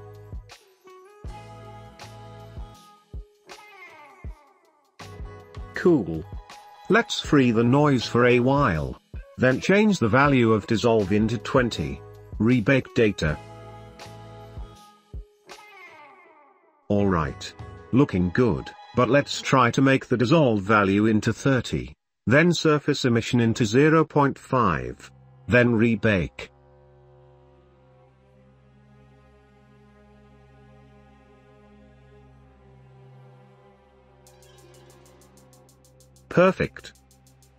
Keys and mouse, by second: 1.2 space, 6.9 space, 10.8 click, 11.7 drag, 12.2 space, 16.9 space, 21.0-22.1 drag, 24.2 click, 31.0 space, 36.3 space.